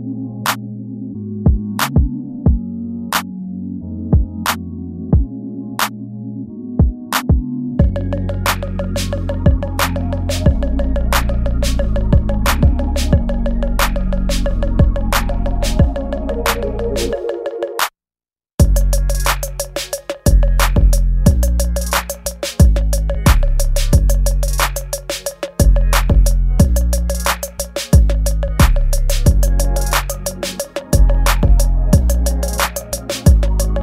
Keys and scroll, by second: 6.7 ctrl+s, 8.2 ctrl+z, 9.7 ctrl+z, 10.3 ctrl+z, 11.7 ctrl+z, 18.8 ctrl+s, 21.6 space, 22.5 ctrl+z, 23.2 ctrl+z, 23.6 space, 24.9 ctrl+z, 25.3 space, 25.5 ctrl+z, 25.8 space, 26.0 ctrl+z, 26.7 space, 27.0 ctrl+z, 27.3 ctrl+z, 27.6 ctrl+z, 27.9 space, 28.5 space, 30.5 space, 31.7 space, 32.9 ctrl+z, 33.2 ctrl+z.